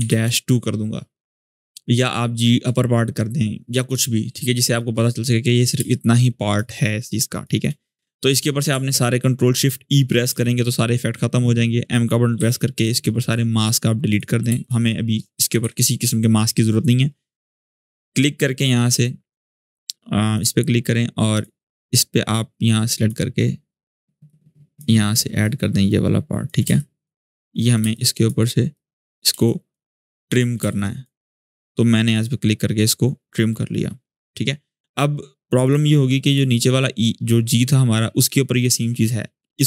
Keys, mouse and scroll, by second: 0.0-0.3 typing, 5.1-5.5 scroll up 2, 5.5 space, 5.7-6.6 click, 6.0 space, 7.1-7.4 space, 10.1 ctrl+shift+e, 12.2 m, 13.3 click, 14.4-17.0 shift+drag, 18.2-18.7 scroll up 1, 18.7 space, 18.8 click, 19.2 space, 20.1-23.0 drag, 24.0-24.6 click, 25.2-25.8 click, 26.4-30.9 typing, 26.5 click, 27.1 click, 27.7-28.3 click, 28.5-29.1 click, 29.2 click, 29.8 click, 30.5 click, 31.9 click, 35.4 click, 36.6-37.9 scroll down 1.